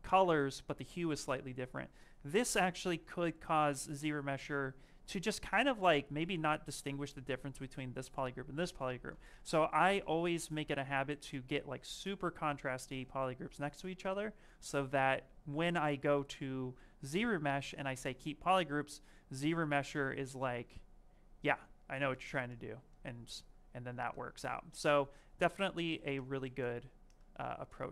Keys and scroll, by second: 5.3 s, 9.0 ctrl+shift+z, 9.3 ctrl+shift+z, 9.8 ctrl+shift+z, 10.3 ctrl+shift+z, 23.6 s, 24.5 s.